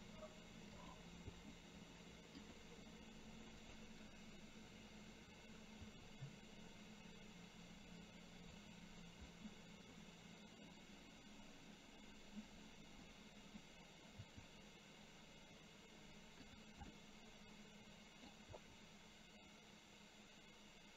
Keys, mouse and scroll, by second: 3.6 click, 9.4 middle click, 12.5 click, 13.2 middle click, 17.1-18.3 middle drag.